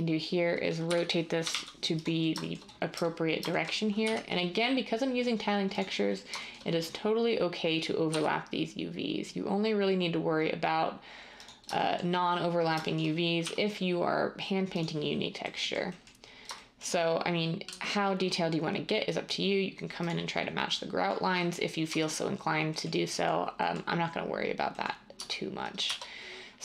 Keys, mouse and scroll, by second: 0.8-1.6 typing, 4.0 g, 8.1 s, 13.4 g, 17.6 s, 21.8 Tab, 25.1 Tab, 25.8 Tab.